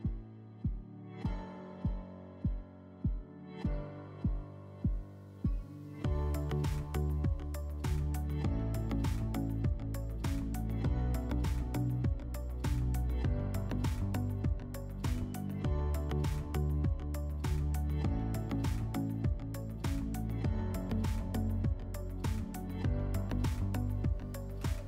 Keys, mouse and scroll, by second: 1.1-2.2 drag, 3.2 click, 7.2 click, 9.2 click, 14.4-15.9 drag, 15.9-16.6 middle drag, 16.6-17.1 drag, 17.1 scroll, 17.8 click, 18.5-18.9 scroll, 19.6 middle click, 20.9-22.5 drag.